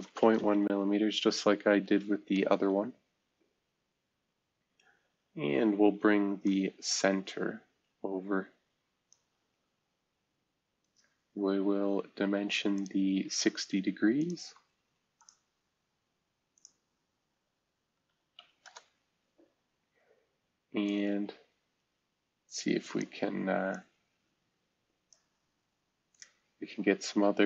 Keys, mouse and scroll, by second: 0.0-0.5 typing, 1.7 Delete, 1.8 Delete, 2.0 Delete, 2.5 Return, 6.4-7.9 drag, 9.5-9.9 scroll down 1, 9.9-10.7 scroll up 1, 15.1 click, 16.5 click, 18.0-18.8 typing, 18.6 Return, 20.8-23.0 drag, 23.7 click, 25.5 scroll down 2, 26.0 scroll up 2.